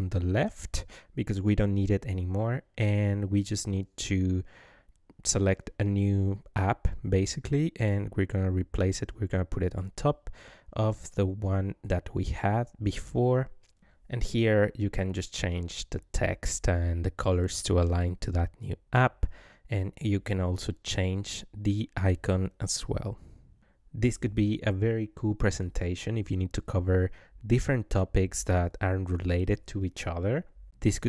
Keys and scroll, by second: 1.6 BackSpace, 5.6 Left, 12.9 ctrl+v, 16.9 ctrl+a.